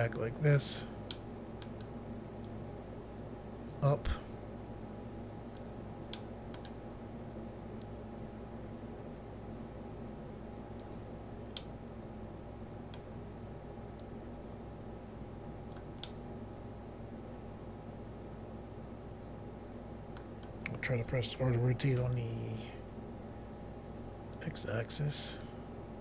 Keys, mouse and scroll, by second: 1.2 middle click, 2.5 click, 6.2 middle click, 7.9 click, 11.6 middle click, 14.0 click, 16.1 middle click, 21.4 r, 22.0 x, 24.4 click, 24.8 click, 25.5 click.